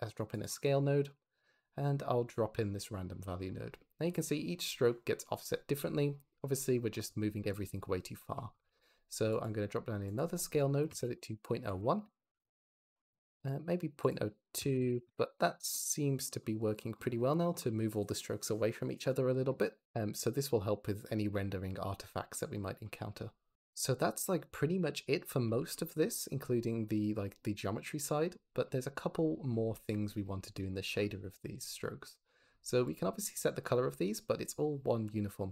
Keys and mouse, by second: 0.3 click, 0.5 click, 1.3 click, 3.2 click, 3.7-5.6 drag, 7.3 click, 8.6 shift+d, 9.3 click, 10.0-12.0 drag, 13.9-15.0 drag, 22.1 click, 22.4 m, 23.5 m, 32.8 click.